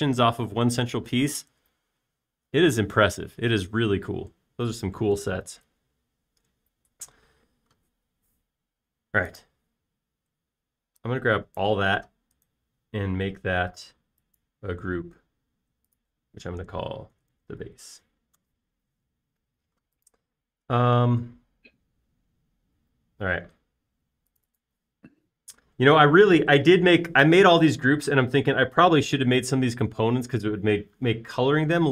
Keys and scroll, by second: 18.0-19.2 typing, 19.4 Return.